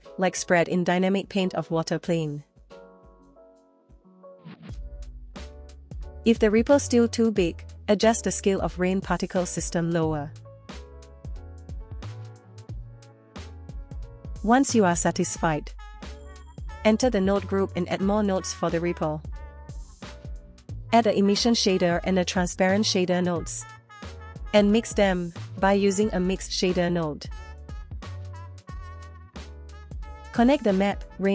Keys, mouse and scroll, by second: 0.2 click, 1.3 space, 2.8 shift+space, 2.8 shift+Left, 3.7 click, 4.6 space, 5.1 space, 5.3 scroll down 1, 5.4 click, 6.2 click, 8.0 click, 9.2-11.1 scroll up 1, 11.1 space, 12.5 space, 13.1 space, 14.2 middle click, 14.2 click, 14.2 scroll down 1, 14.2 space, 15.1 click, 15.5-16.4 scroll down 4, 17.4 click, 18.4 shift+middle click, 19.2 click, 20.7 scroll up 2, 21.0 shift+a, 24.5 shift+a, 25.7 ctrl+shift+right click, 26.7 click, 27.5-28.2 drag, 30.0 middle click, 30.9-31.3 drag.